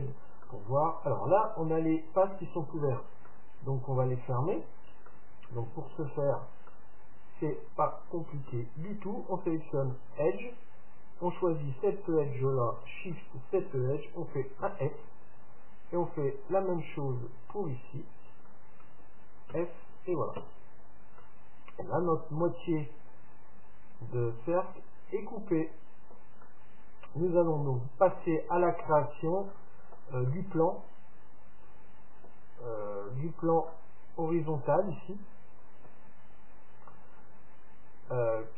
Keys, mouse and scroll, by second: 3.3-8.5 middle drag, 8.5 Tab, 10.1-12.0 drag, 11.3 right click, 12.0-15.1 right drag, 14.7 f, 16.4-18.4 right drag, 18.5-20.4 right drag, 19.6 f, 20.4 Tab, 20.9-23.1 middle drag, 26.4-28.4 middle drag, 29.5-32.1 middle drag, 33.7-35.6 middle drag, 35.7-37.5 right drag.